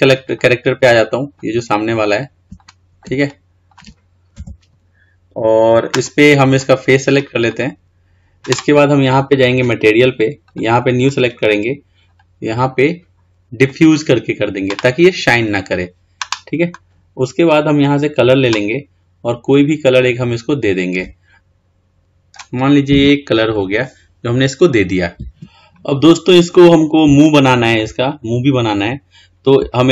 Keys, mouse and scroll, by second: 3.9-4.6 scroll down 1, 4.6 KP_1, 5.2-6.7 scroll up 2, 6.7 click, 7.7 click, 9.8-15.3 drag, 18.0 click, 23.6 scroll down 4, 24.3-25.1 scroll up 3, 25.8-26.3 scroll up 2, 26.3-27.5 scroll down 1, 27.5-28.2 shift+middle drag, 28.2-28.8 scroll up 5, 28.8-29.1 scroll down 2, 29.1-29.8 scroll up 1, 29.8 scroll down 1.